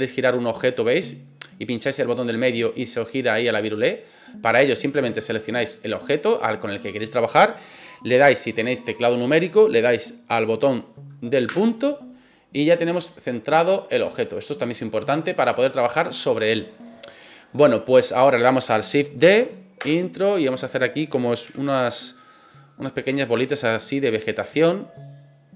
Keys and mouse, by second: 5.7 right click, 6.2 right click, 11.6 KP_Decimal, 13.2-15.8 middle drag, 16.9-17.3 middle drag, 19.3 shift+d, 19.8 Return, 20.2 click, 21.4 s, 22.5 click, 23.0-24.1 middle drag, 24.7-25.5 drag.